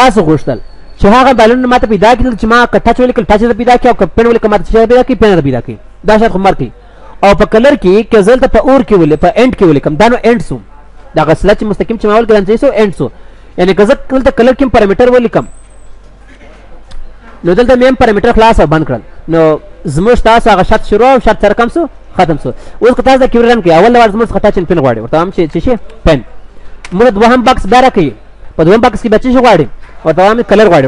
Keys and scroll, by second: 15.0 F9, 18.5 F9.